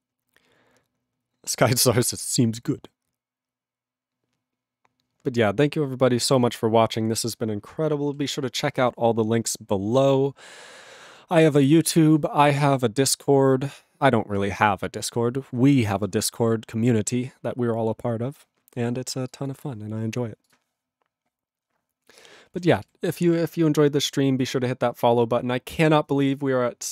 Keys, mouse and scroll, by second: 20.5 click, 22.6 ctrl+e, 22.7 ctrl+b, 22.8 ctrl+b.